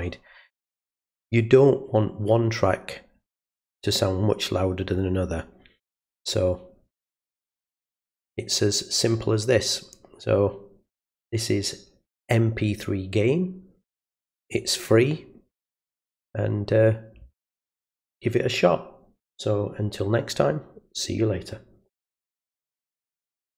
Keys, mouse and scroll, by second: 23.5 click.